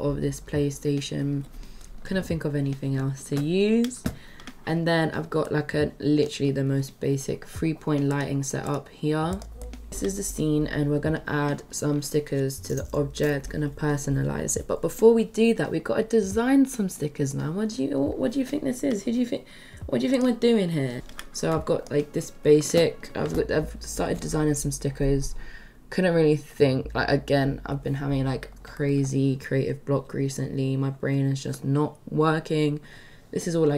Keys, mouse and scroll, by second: 5.5-6.5 middle drag, 8.1 click, 9.3 click, 9.6 middle drag.